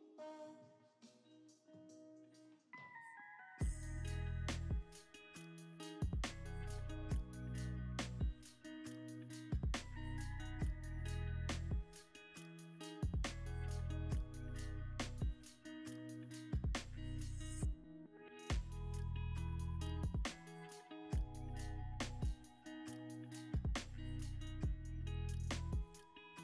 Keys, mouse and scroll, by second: 8.2 double click, 10.2-10.8 scroll up 1, 10.8 a, 11.5 g, 11.6 z, 12.5 scroll, 12.5-13.2 scroll down 1, 15.6 s, 18.3 g, 19.5 x, 20.0 u, 21.1 y, 26.0 s.